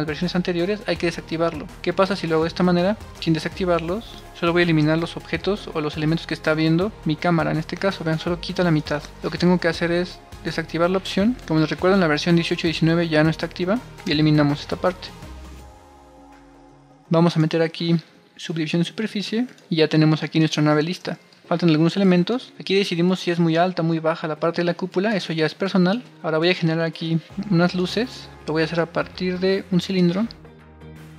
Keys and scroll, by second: 4.7 BackSpace, 8.8 super+z, 14.0 BackSpace, 20.9 super+r.